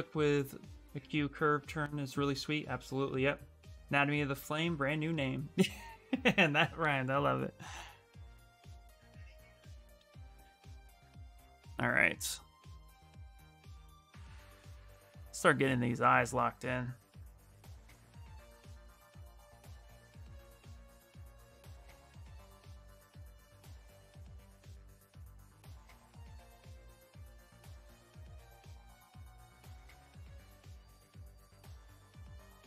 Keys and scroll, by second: 11.0 s, 14.5 b, 15.2 s, 17.1 x, 19.6 x, 19.9 s.